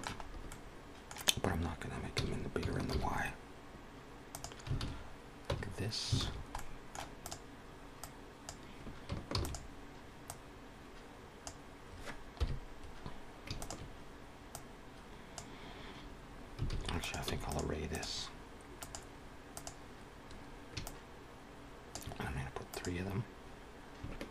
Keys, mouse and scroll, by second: 0.1 scroll up 2, 0.3 middle click, 2.1 s, 4.9 alt+a, 5.4 Tab, 6.1 alt+a, 6.2-6.5 scroll down 2, 6.5 middle click, 7.1 click, 7.9 click, 9.2 shift+d, 10.2 click, 12.1 KP_1, 13.4 shift+click, 14.4 click, 16.8 alt+a, 16.8 click, 17.1 x, 17.8 click, 18.7 click, 20.7 shift+click, 22.6 click, 24.2 shift+click.